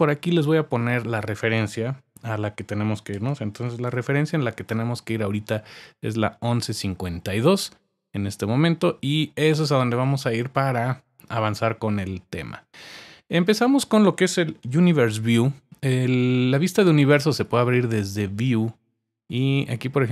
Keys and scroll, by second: 2.9-4.3 typing.